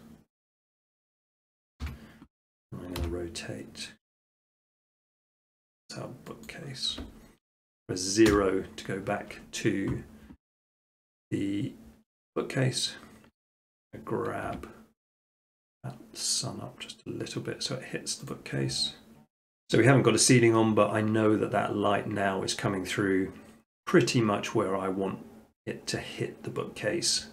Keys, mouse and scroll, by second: 0.9-2.0 drag, 1.8 7, 3.0 r, 6.5-7.5 drag, 8.3 0, 13.8 g, 14.5 z, 18.3-19.5 drag.